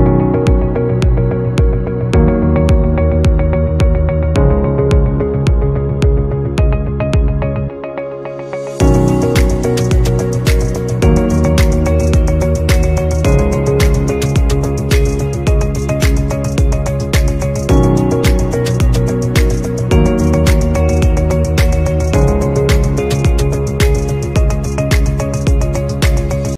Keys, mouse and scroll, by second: 4.0 shift+click, 5.5 right click, 8.4 shift+click, 10.1 alt+scroll up 1, 16.3 double click, 21.1 space, 21.9 scroll up 1.